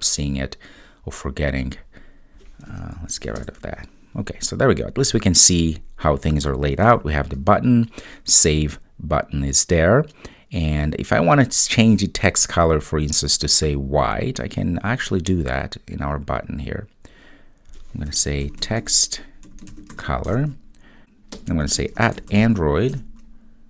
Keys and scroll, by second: 7.0 super+s, 20.4 Return, 22.9 Return.